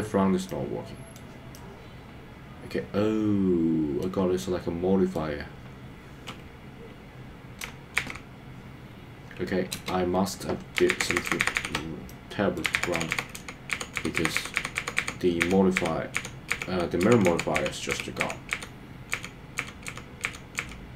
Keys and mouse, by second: 0.5 middle click, 1.6-4.0 middle drag, 4.4 middle click, 8.2 super+z, 9.8 space, 11.1 super+z, 11.3 super+z, 11.5 super+z, 11.7 super+z, 12.1 middle click, 12.8 super+z, 13.0 super+z, 13.3 super+z, 13.5 super+z, 13.9 super+z, 14.1 super+z, 14.3 super+z, 14.5 super+z, 14.7 super+z, 14.9 super+z, 15.1 super+z, 15.5 super+z, 15.9 super+z, 16.2 super+z, 16.6 super+z, 17.0 super+z, 17.4 super+z, 17.6 super+z, 17.9 super+z, 18.3 super+z, 18.6 super+z, 19.1 super+z, 19.6 super+z, 19.9 super+z, 20.4 super+z, 20.6 super+z.